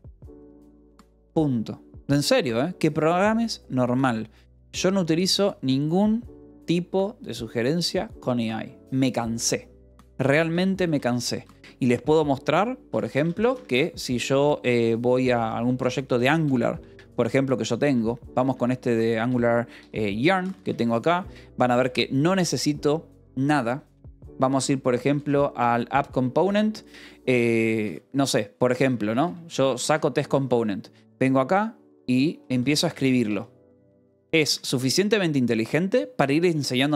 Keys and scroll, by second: 3.6 j, 10.3 q, 10.8 Return, 11.3 p, 11.5 space, 12.6-13.8 typing, 15.2 BackSpace, 16.4 n, 16.6 Tab, 19.2 Return, 20.3 n, 20.6 Return, 21.7 space, 23.6-27.5 typing, 26.3 Return, 29.7 d, 30.2 j, 31.2 l, 32.6-34.9 typing.